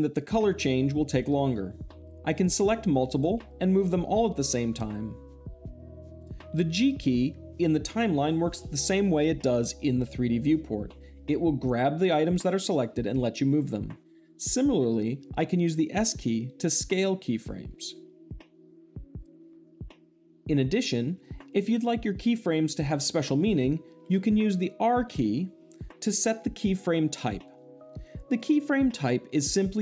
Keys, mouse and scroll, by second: 2.3-3.3 drag, 3.7 g, 6.1 click, 14.0 right drag, 17.8 s, 19.1 click, 20.0 s, 24.9 r.